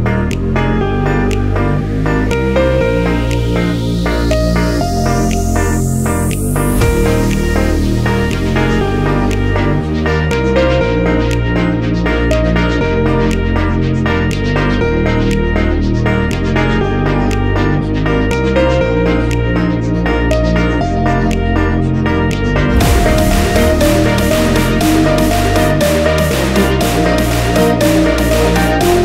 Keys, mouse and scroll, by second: 11.6 scroll down 1, 12.4-13.2 scroll up 1, 19.4 scroll down 1, 20.3-20.9 scroll up 1, 21.2-22.0 scroll down 1.